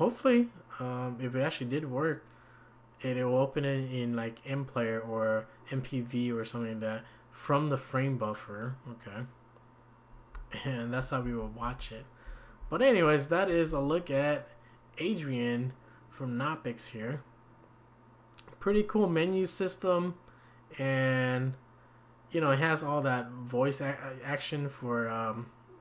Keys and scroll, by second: 10.3 Down, 10.9 Down, 11.0 Down, 11.2 Down, 11.6 typing, 12.3 Up, 13.0 Down.